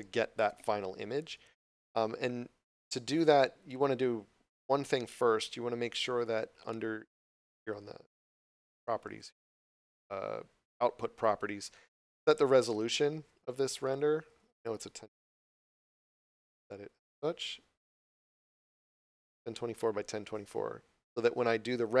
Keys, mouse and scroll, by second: 12.8 click, 13.9 1, 15.8 click, 16.8 1.